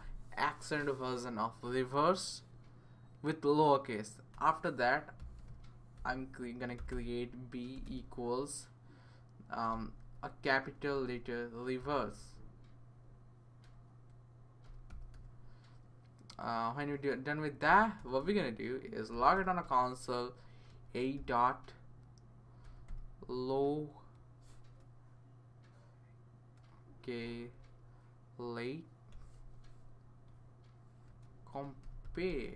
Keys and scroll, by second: 4.3 Return, 4.9-8.2 typing, 9.4-12.6 typing, 13.7-15.6 typing, 16.8 Right, 17.4-19.1 typing, 18.2 Return, 19.3 Return, 20.7-21.1 typing, 22.4-23.1 typing, 26.6-27.6 typing, 28.8-29.6 typing, 30.8-32.5 typing.